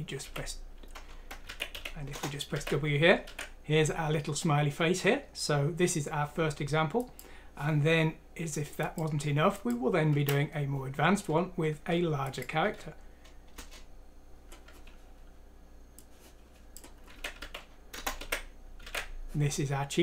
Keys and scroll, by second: 0.2 w, 1.5 alt+w, 2.1 Return, 2.6 alt+w, 3.4 alt+w, 10.2 F5, 11.7 Escape, 12.6 F6, 13.6 Return, 17.2 alt+w, 17.9 Return, 18.2 alt+w.